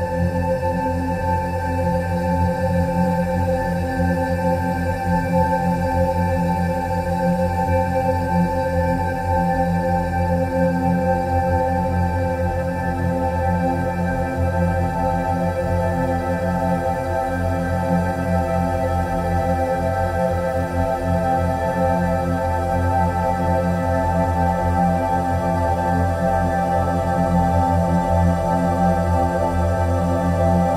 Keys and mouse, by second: 1.7-2.1 drag, 3.5-7.4 drag, 8.9 e, 10.1-14.5 drag, 15.9-17.1 drag, 18.3 ctrl+b, 23.2 click, 25.6 e, 29.5 click, 29.7-30.7 drag.